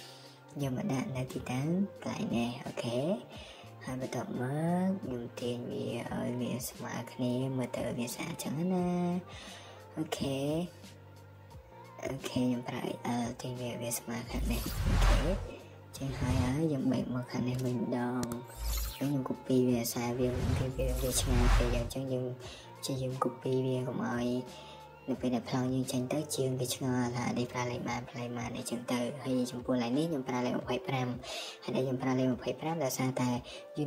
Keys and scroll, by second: 2.0 Escape, 5.8 Escape, 8.1 Escape, 9.1 x, 10.3-11.1 typing, 13.8 Escape, 16.8-17.3 typing, 18.5 typing, 18.9 Escape, 19.1 Escape, 19.2 Escape, 19.4 Escape, 26.6-28.2 typing, 29.8 Right, 31.5-32.2 typing.